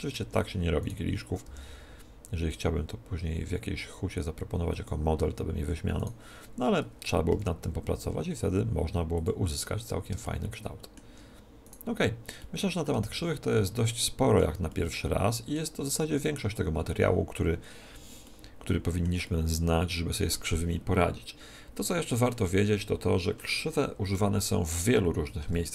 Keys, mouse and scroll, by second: 0.7-2.7 right drag, 1.3 g, 4.8-5.8 drag, 5.8 middle click, 6.5-7.8 right drag, 7.2 v, 9.8-11.5 middle drag, 11.5-13.3 right drag, 12.8 Tab, 13.3-16.3 middle drag, 18.1-21.0 middle drag, 25.3 KP_1.